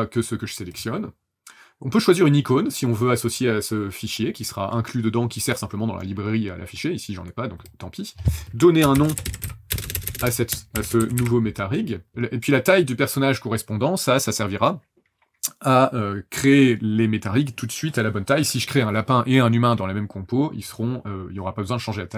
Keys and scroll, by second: 8.7-11.7 typing.